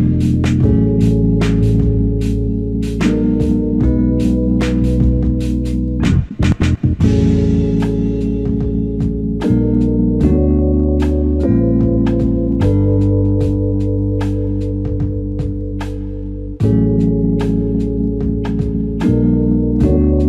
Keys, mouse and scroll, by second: 0.3 alt+click, 1.1 ctrl+alt+scroll down 1, 2.6-3.1 ctrl+alt+scroll down 1, 3.6-4.2 scroll down 1, 4.2 scroll up 1, 5.3 alt+click, 10.4 scroll down 1, 13.6 ctrl+Tab.